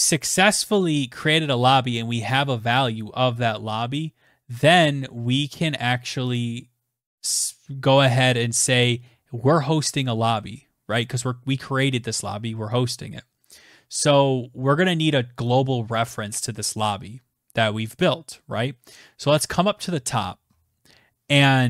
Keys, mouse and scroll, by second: 18.0-20.2 scroll, 20.2-21.6 scroll.